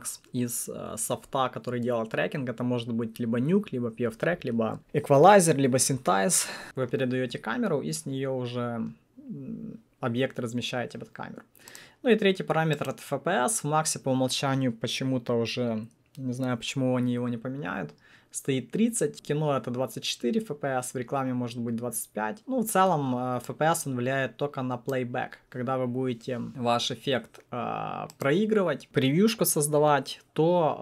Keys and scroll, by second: 26.2-27.0 typing.